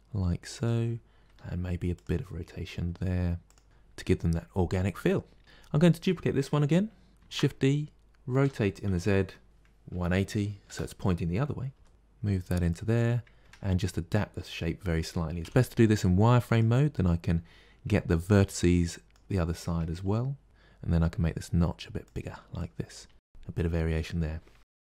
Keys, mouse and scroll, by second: 1.1 r, 2.6 g, 3.6 r, 5.4 click, 7.2 shift+d, 8.3 r, 11.6 g, 13.3 Tab, 15.3 z, 17.7 1, 18.4 click, 19.9 g, 22.4 click, 22.9 g.